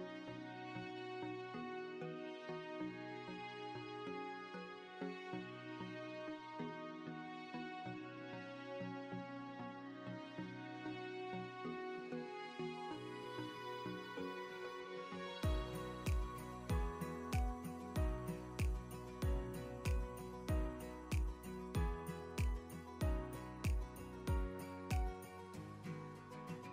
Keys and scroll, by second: 3.3 ctrl+t, 22.3 Return.